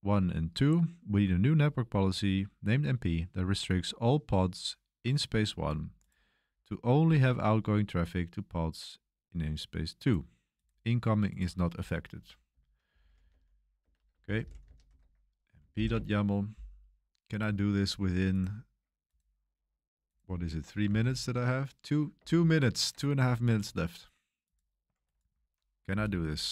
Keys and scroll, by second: 12.6-16.2 typing, 20.9 super+3, 22.1 super+1, 22.4 super+3, 25.9 i, 26.3 super+b, 26.3 super+v.